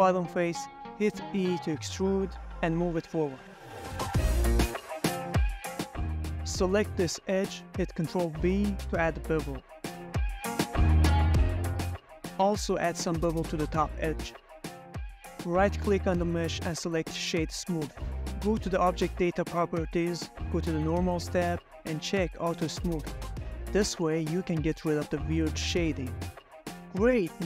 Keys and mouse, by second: 0.2 middle click, 0.7 middle click, 1.2 3, 1.5 click, 2.4 e, 5.9 click, 6.1 middle click, 6.7 2, 7.1 click, 7.7 ctrl+b, 10.8 click, 11.1 Tab, 11.3-12.1 middle drag, 12.2 shift+middle drag, 12.6 middle click, 13.0 Tab, 13.3 click, 13.7 ctrl+b, 15.5 click, 15.7 Tab, 16.1 ctrl+middle drag, 16.4-17.1 right drag, 17.3 middle drag, 17.5 q, 19.0 click, 19.6 click, 21.1 click, 21.6 click, 22.8-23.4 middle drag, 23.5 shift+middle click, 23.9-24.7 middle drag, 24.9 ctrl+middle click, 25.4 ctrl+middle click, 26.4 click, 27.3-27.4 drag.